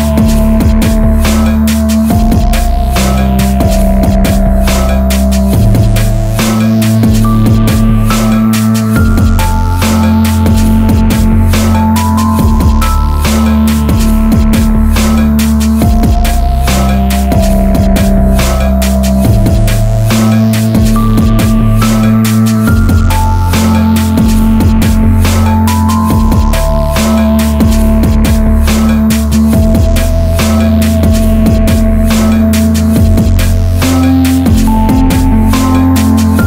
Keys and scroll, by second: 4.1 ctrl+t, 4.5 Return, 5.4 ctrl+t, 5.8 Right, 6.3 Up, 7.1 Return, 8.8-10.2 typing, 11.3 ctrl+t, 14.2 Return.